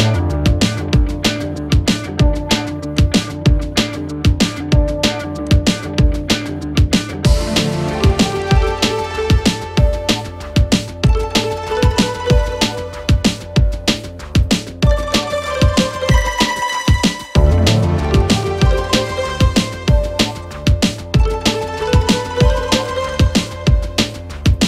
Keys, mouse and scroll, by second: 0.0-2.1 typing, 1.3 click, 5.0-5.7 typing, 5.5 click, 6.4 right click, 7.3 click, 7.4-8.2 typing, 10.9-24.6 drag.